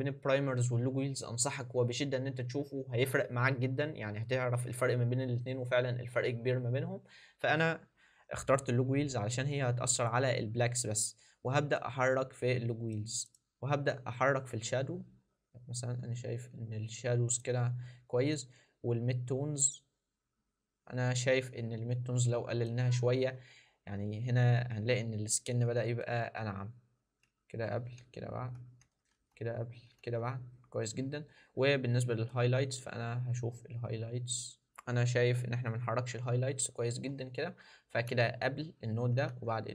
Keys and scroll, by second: 27.1 ctrl+d, 27.8 ctrl+d, 28.4 ctrl+d, 29.1 ctrl+d, 29.8 ctrl+d, 34.6 ctrl+d.